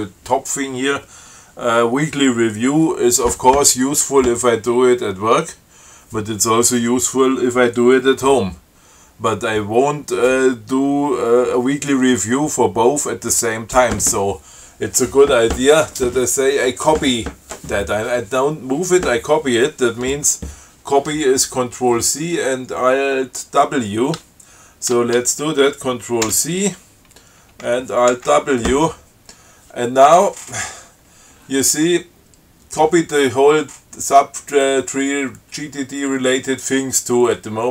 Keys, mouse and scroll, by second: 26.5 ctrl+c, 28.4 alt+w.